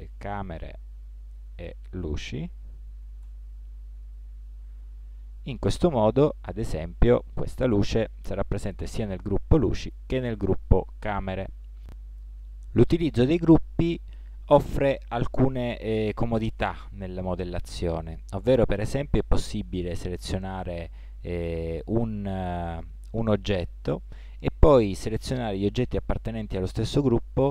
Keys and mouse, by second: 3.3 e, 6.3-11.2 right drag, 20.4-22.2 right drag, 22.7-24.6 right drag.